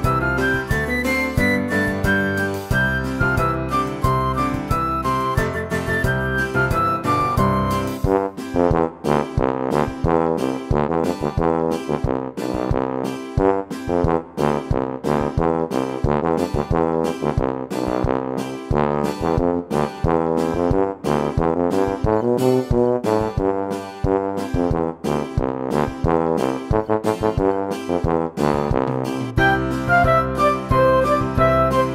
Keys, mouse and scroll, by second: 4.1 space, 5.5 click, 6.0 click, 7.9 Delete, 9.0 click, 9.6-10.8 right drag, 11.5 click, 12.2 click, 12.9 click, 13.5 click, 14.8 click, 15.3 Tab, 16.1 click, 16.7-17.3 scroll up 2, 17.3 click, 18.2 ctrl+b, 21.8 ctrl+r, 22.7 s, 24.7 alt+click, 25.4 click, 26.4 alt+click, 27.3 ctrl+b, 29.3 click, 30.4 alt+shift+click, 31.0 ctrl+b.